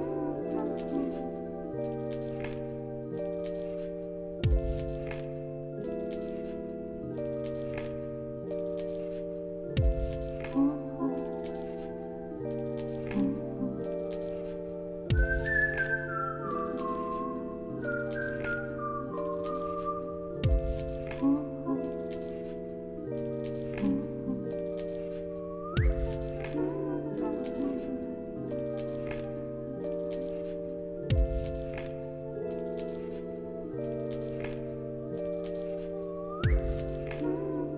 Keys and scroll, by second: 3.3 space, 4.2 ctrl+s, 7.5 ctrl+z, 8.4 ctrl+s, 24.4 ctrl+z, 34.3 ctrl+z.